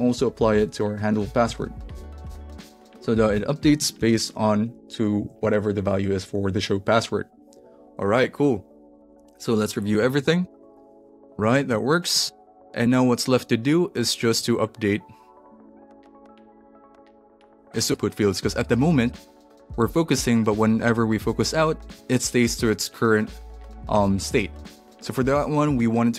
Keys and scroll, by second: 1.4 Left, 2.4 alt+shift+Left, 3.9 super+v, 5.2 super+s, 9.7-12.7 typing.